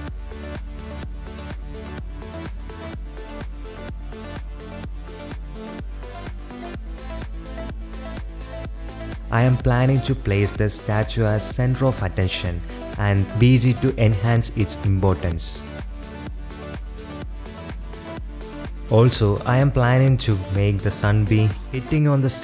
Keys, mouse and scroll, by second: 0.0-5.6 typing, 6.0 click, 6.1 click, 6.2 shift+click, 6.5 click, 6.8 click, 6.9-11.2 typing, 7.2 click, 7.4 shift+click, 7.6 click, 9.4 middle click, 9.5 shift+middle click, 9.5 shift+drag, 10.7 click, 11.4 click, 11.6 shift+click, 11.8 click, 12.6 g, 13.3 drag, 13.7 shift+click, 13.7 shift+a, 15.7 s, 16.3 KP_7, 17.0 g, 17.8 Tab, 18.3 a, 18.6 e, 18.8 s, 19.9 middle click, 20.5 middle click, 21.0-22.4 typing.